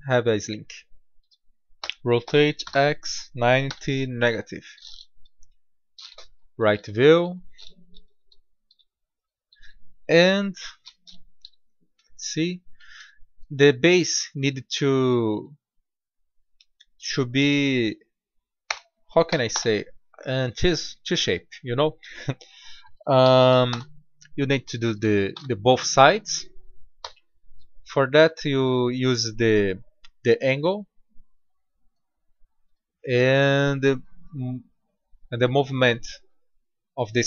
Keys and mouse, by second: 1.8 r, 5.1 KP_3, 7.9 KP_1, 8.6 KP_7, 10.0 KP_3, 10.2 KP_1, 11.4 KP_3, 16.3-18.1 drag, 21.5-23.3 drag, 25.3 Tab, 27.0 g, 30.5-32.3 drag.